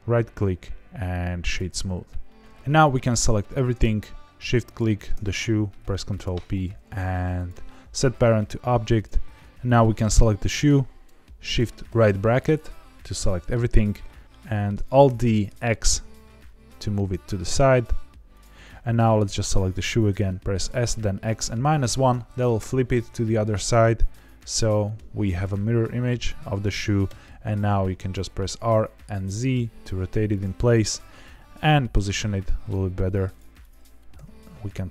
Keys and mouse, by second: 2.2 middle click, 2.9 click, 5.9 ctrl+p, 9.3 middle click, 11.8 shift+], 14.4 middle drag, 15.0 alt+d, 15.4 z, 16.2 x, 18.3 click, 20.5 s, 20.9 x, 21.6 KP_Subtract, 21.8 KP_1, 22.5 KP_Enter, 23.2 middle click, 24.6-24.9 middle drag, 26.3 middle click, 27.0 r, 27.2 z, 30.3 click, 30.8 KP_7, 31.9 g, 33.2 click, 33.6 click, 34.1 g.